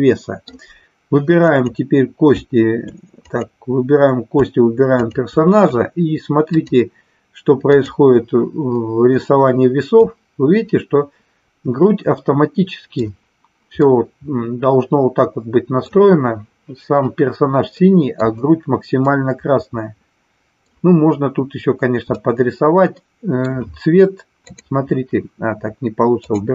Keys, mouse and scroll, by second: 1.5 click, 4.9 shift+click, 6.5-8.0 drag, 9.9-13.0 middle drag, 13.8-15.9 middle drag, 17.8 middle click, 19.0-20.7 middle drag, 22.2-23.4 middle drag, 24.4 click, 26.2 click.